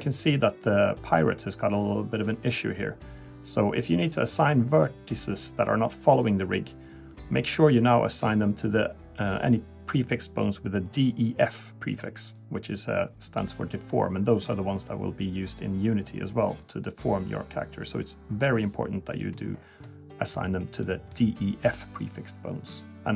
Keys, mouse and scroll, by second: 0.6 click, 1.3-2.0 scroll up 2, 2.0 Tab, 3.4 click, 3.8 click, 4.2 ctrl+Tab, 4.2 click, 4.4 scroll up 1, 4.8 Tab, 5.3 click, 8.7 click, 10.7 click, 11.0 click, 11.8 click, 12.7 Tab, 15.9 click, 16.3 click, 16.9 ctrl+Tab, 17.5 click, 19.2 click, 20.0 scroll down 2, 20.2-20.7 scroll up 2, 21.8 click.